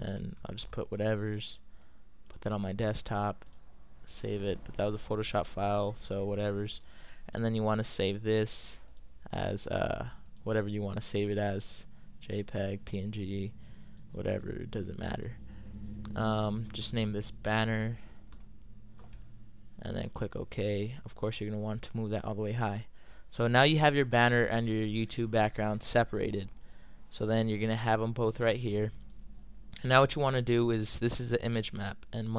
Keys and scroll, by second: 0.0-1.2 typing, 15.8 typing, 17.3-18.8 typing, 20.5 typing.